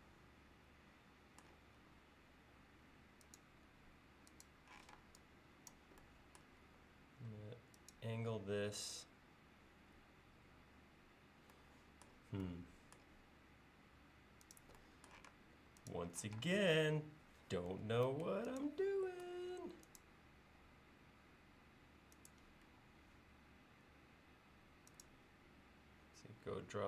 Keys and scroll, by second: 1.8 l, 4.8 p, 6.6 l, 15.3 space, 16.3 q, 17.7 Left, 18.0 Right, 22.7 l.